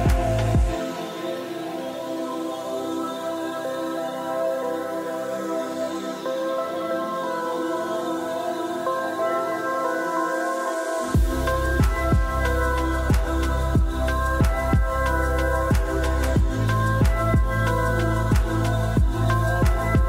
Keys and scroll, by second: 4.2 Tab, 4.4-6.0 typing, 9.7-10.5 typing, 12.8-13.3 typing.